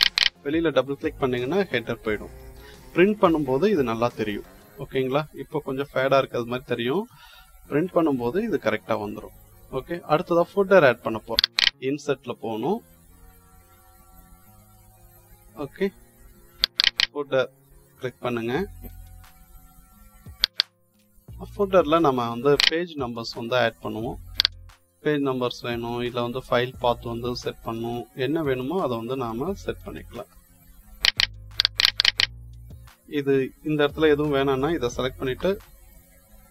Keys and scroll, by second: 35.3 Delete.